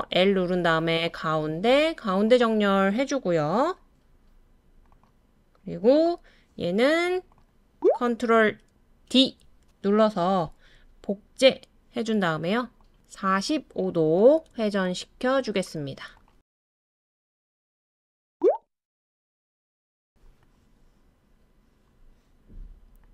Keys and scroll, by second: 9.1 ctrl+super+d, 18.5 super+d, 19.1 super+d.